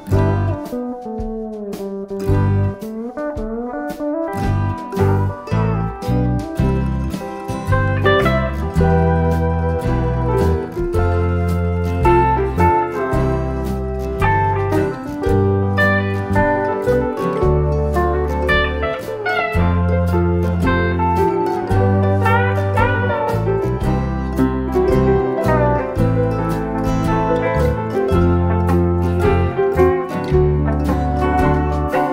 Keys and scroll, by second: 2.5 ctrl++, 2.7 typing, 4.3 p, 4.8 shift+F6, 8.4 BackSpace, 8.9 F1, 10.3 shift+F6, 15.0 F1, 16.3 ctrl+d, 16.9 ctrl+*, 19.9 F1, 21.7 F1, 22.1 ctrl+-, 23.5 space, 24.4 shift+F6, 31.0 F7, 31.5 F1.